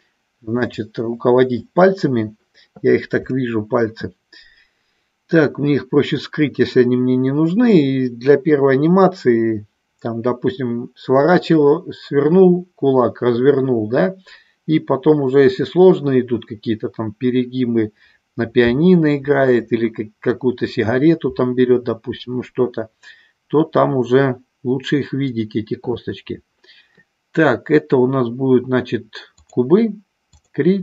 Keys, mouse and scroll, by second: 0.7-29.6 drag.